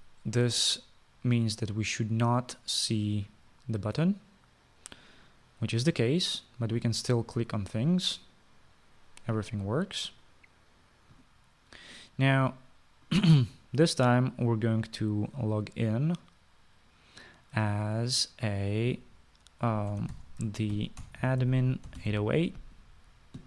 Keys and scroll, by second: 21.1-23.4 typing.